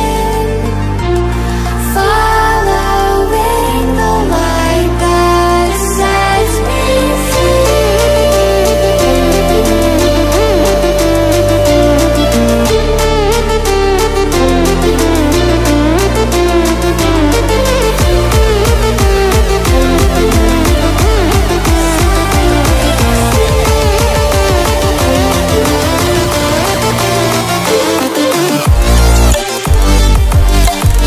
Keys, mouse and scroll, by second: 0.8 click, 3.7-6.5 drag, 11.1-11.9 alt+scroll down 2, 11.9 alt+scroll up 1, 13.0 click, 21.4 ctrl+z, 22.8 click, 24.0 alt+scroll up 1, 24.8-28.2 drag.